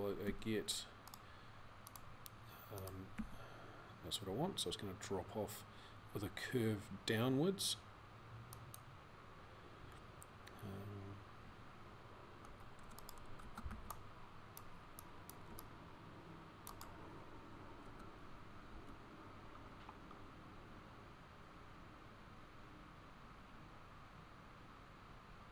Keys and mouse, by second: 0.1 g, 3.0 g, 13.5 c, 18.4 g.